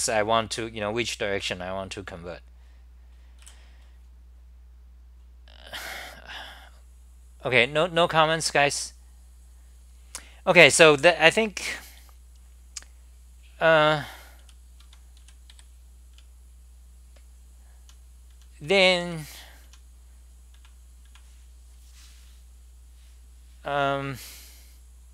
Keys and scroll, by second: 0.0 w, 14.6-21.1 typing.